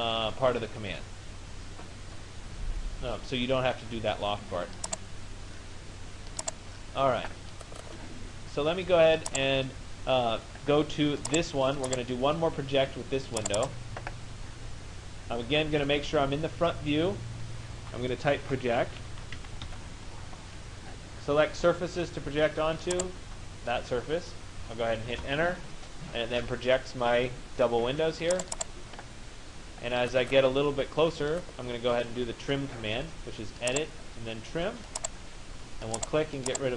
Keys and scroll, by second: 19.3 t, 19.9 Return, 24.9 Return.